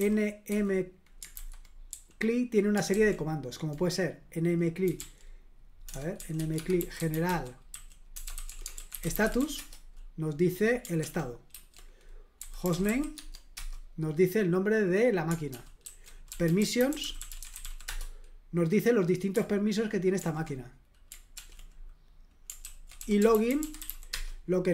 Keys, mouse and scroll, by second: 0.0-0.5 typing, 1.3 super+h, 1.9 j, 2.9 super+l, 4.6-9.9 typing, 11.0 ctrl+p, 11.5 ctrl+w, 12.1-13.3 typing, 13.5 Return, 15.5 ctrl+p, 15.8 ctrl+w, 16.0-18.1 typing, 20.2 ctrl+l, 21.3 ctrl+p, 22.6 ctrl+w, 22.8-24.4 typing.